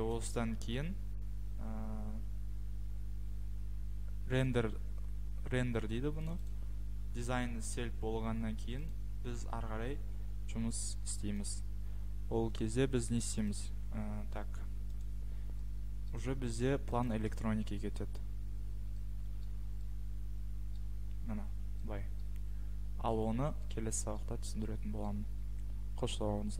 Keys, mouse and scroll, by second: 4.5 click, 6.5 click, 8.9 click, 11.5 click, 13.5 click, 16.1-16.4 scroll, 18.3 click, 19.4 click, 19.4 scroll, 21.0-21.3 scroll, 21.9-22.3 scroll, 23.6 scroll, 25.0-25.4 scroll.